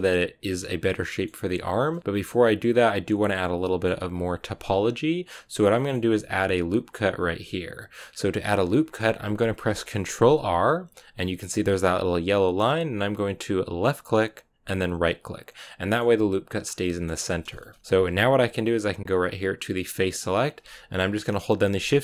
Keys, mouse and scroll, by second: 1.4-1.8 scroll up 2, 1.8-5.6 middle drag, 5.6 scroll up 1, 5.6-10.1 middle drag, 10.1 ctrl+r, 15.4-16.5 middle drag, 16.5 scroll down 3, 16.7-19.8 middle drag, 19.8 click, 20.4-21.1 scroll up 1, 21.1-21.8 scroll up 1, 21.8-22.0 shift+right drag.